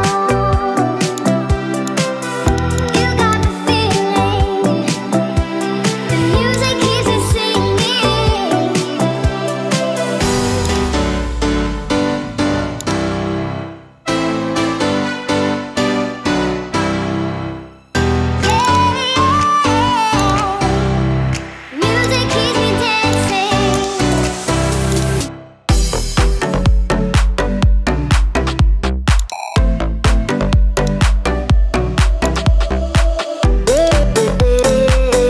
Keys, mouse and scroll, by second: 11.8 click.